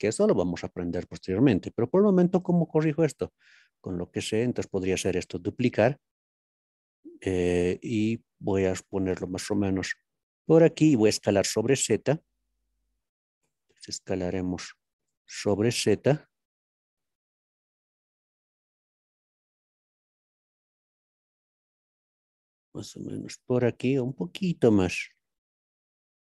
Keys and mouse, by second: 5.5 shift+d, 7.8 z, 10.7 click, 15.1 s, 15.1 z, 19.5 click, 21.1 z, 23.0 click, 24.0 f.